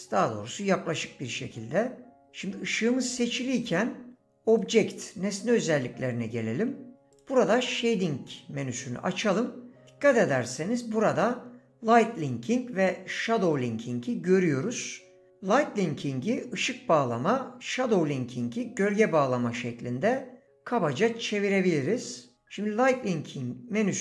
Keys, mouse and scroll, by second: 4.5 click, 7.1 click.